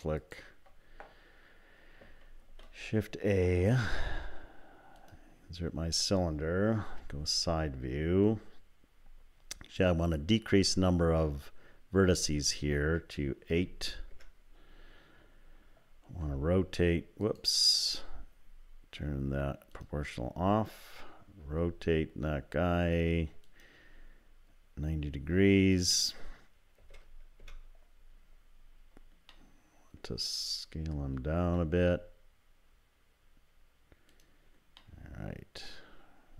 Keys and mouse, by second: 0.2 shift+click, 2.4 shift+a, 5.2 shift+a, 6.9 KP_3, 12.3-14.8 drag, 16.2 r, 19.8 click, 21.4 r, 25.8-28.2 drag, 29.3 middle click, 31.4 s, 34.8 click.